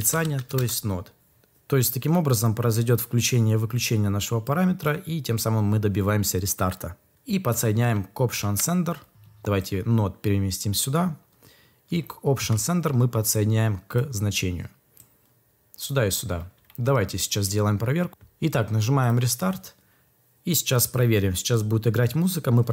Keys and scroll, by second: 0.0-0.5 typing.